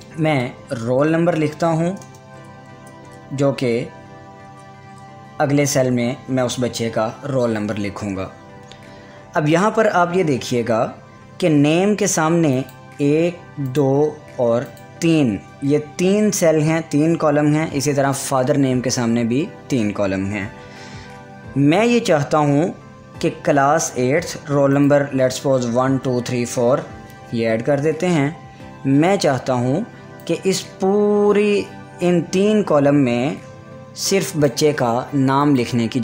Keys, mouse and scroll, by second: 0.0-2.8 typing, 4.5 Tab, 12.6 click, 24.8 click, 25.4-26.8 typing, 30.5-35.5 drag.